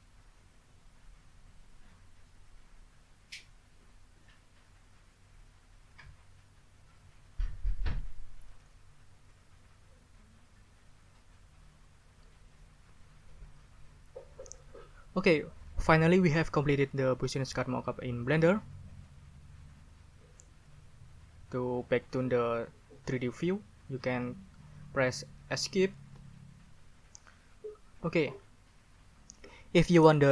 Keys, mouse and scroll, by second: 26.1 Escape.